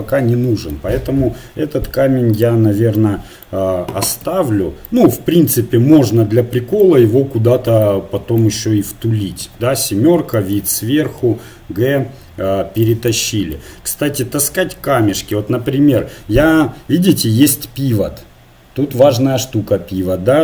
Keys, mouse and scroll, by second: 2.5-4.2 drag, 4.2 KP_Divide, 6.8 middle click, 7.0 KP_1, 9.5 KP_7, 11.2 g, 12.9 click, 13.2-15.2 drag, 15.2 middle click, 15.5 KP_1, 15.9 middle click, 17.0-18.7 middle drag.